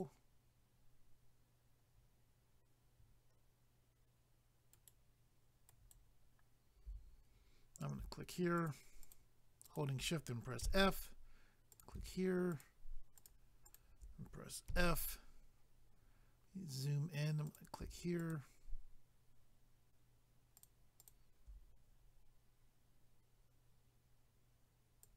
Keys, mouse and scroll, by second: 4.7 ctrl+right click, 7.8 click, 8.6 shift+click, 9.7 shift+click, 11.7 click, 12.5 shift+click, 13.2 shift+click, 13.8 shift+double click, 16.0 scroll up 1, 17.5 click, 18.2 shift+click, 20.6 shift+click, 21.0 shift+click, 25.0 click.